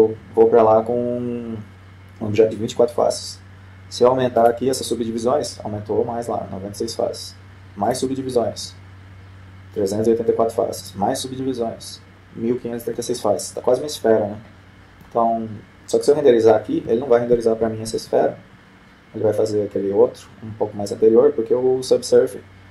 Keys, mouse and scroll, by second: 5.6-6.9 drag, 9.0-10.4 drag, 12.0-13.3 drag, 14.7-16.1 middle drag, 20.4 F12.